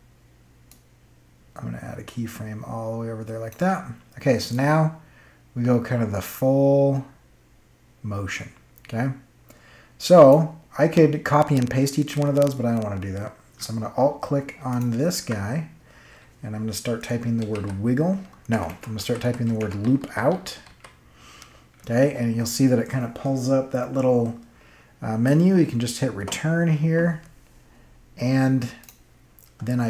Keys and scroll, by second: 17.4 w, 18.5-21.1 typing, 26.1 Return.